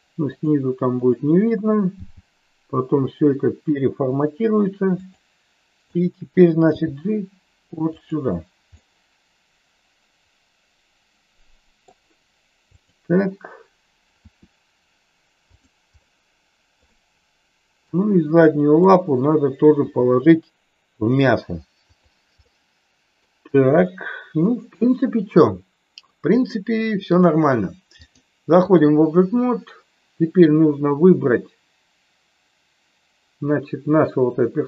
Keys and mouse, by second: 0.3 click, 0.9 click, 1.9 g, 5.8 click, 6.5 g, 8.7-11.9 middle drag, 12.8 click, 14.2 r, 15.4 click, 16.0-16.7 middle drag, 16.8-17.8 middle drag, 18.8 click, 19.8 g, 21.9 click, 22.4-23.2 middle drag, 23.8-26.0 middle drag, 26.4 middle click, 28.0 click.